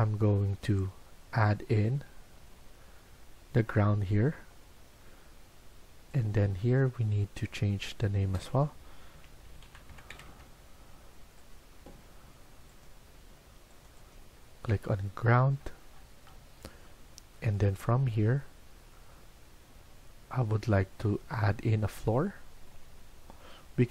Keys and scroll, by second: 8.8-10.7 typing.